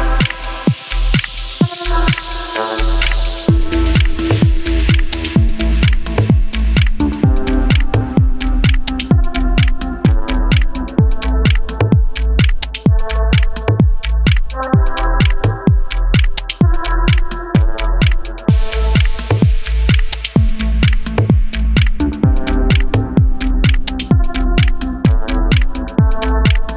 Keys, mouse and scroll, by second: 0.5 drag, 0.7 click, 0.8-4.5 typing, 1.0 middle click, 1.5 click, 2.0 click, 2.5 drag, 2.7 shift+drag, 2.9 shift+drag, 3.1 middle drag, 3.3 middle click, 3.5 scroll up 2, 3.6 shift+middle click, 3.8 alt+drag, 5.2-5.5 scroll down 2, 5.3 shift+middle click, 5.5 scroll up 1, 5.7-12.5 typing, 6.1 alt+click, 6.5 alt+click, 7.3 shift+middle click, 8.5 shift+middle drag, 9.3 alt+click, 10.1 shift+middle click, 10.4 scroll up 1, 10.9 alt+click, 12.2 shift+middle click, 12.6 shift+middle drag, 13.2 ctrl+r, 13.6-15.7 typing, 13.7 alt+click, 14.2 scroll down 4, 15.2 middle drag, 15.6 shift+middle drag, 15.9 click, 16.0 middle drag, 16.5 shift+drag, 16.6 middle drag, 16.8 middle click, 16.9 shift+click, 17.1 middle click, 17.1-19.6 typing, 17.3 middle drag, 17.5 middle click, 17.9 middle click, 18.1 middle click, 18.2 click, 18.3 middle drag, 18.5 shift+click, 18.6 middle click, 18.7 scroll up 2, 18.9 shift+click, 19.0 middle drag, 19.5 middle click, 19.7 scroll down 1, 19.7 middle click, 20.0 shift+middle drag, 20.3 alt+shift+drag, 20.5 scroll down 3, 20.6-20.9 shift+middle drag, 20.9 ctrl+z, 21.0 alt+shift+click, 21.2 s, 21.4 scroll up 2, 21.5 middle click, 21.6 scroll down 3, 21.6-22.3 shift+middle drag, 22.3 alt+click, 22.4 KP_Decimal, 22.6 scroll down 9, 22.7 shift+middle click, 23.0 scroll up 2, 23.1 middle drag, 23.3 middle drag, 23.6 click, 23.7 middle drag, 23.8 shift+click, 23.9-24.4 middle drag, 24.4-26.5 typing, 24.7 middle drag, 24.9 shift+click, 25.4 shift+click, 25.5 middle drag, 25.9 shift+click, 25.9 middle click, 26.3 scroll down 6.